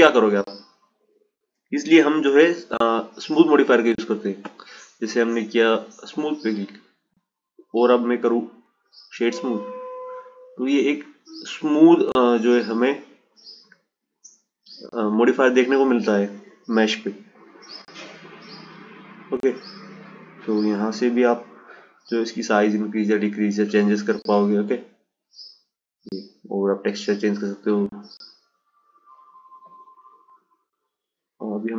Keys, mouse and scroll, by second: 0.7 click, 4.6-5.7 drag, 6.0-9.1 right drag, 9.2 click, 15.2 click, 17.0 click, 20.1-23.2 drag, 25.5-28.5 drag, 29.1-31.7 drag.